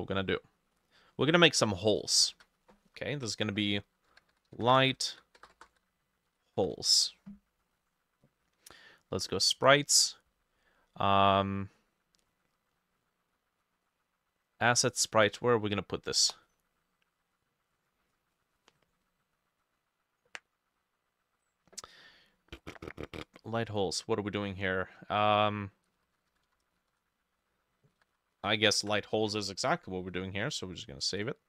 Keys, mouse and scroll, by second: 2.3 ctrl+middle click, 2.4 ctrl+s, 3.9-7.1 typing, 25.8-29.1 typing.